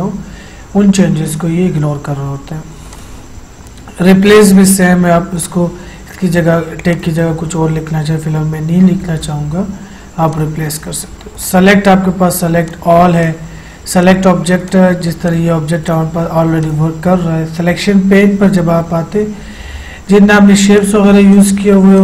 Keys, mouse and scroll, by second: 3.0 click, 10.5 click, 20.9 click.